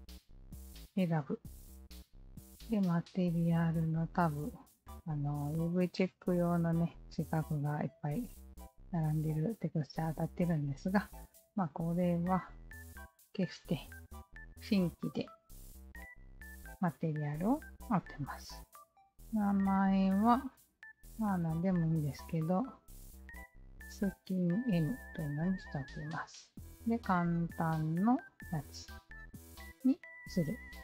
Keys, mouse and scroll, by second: 3.5-4.3 alt+drag, 5.6-6.9 alt+drag, 8.3-10.2 drag, 11.2 alt+click, 11.4-11.8 alt+drag, 13.3 alt+click, 16.0 alt+click, 18.4 alt+click, 18.9 alt+click, 20.0-21.5 typing, 21.9 Return, 25.3 click, 27.9 click, 29.3 click.